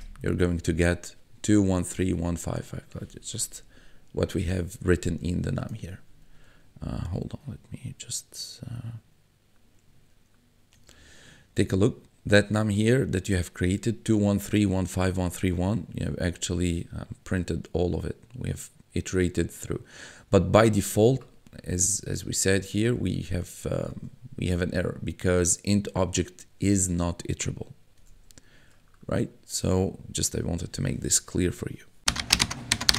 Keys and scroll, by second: 11.0 1, 20.8 1, 24.0 1, 28.2 1.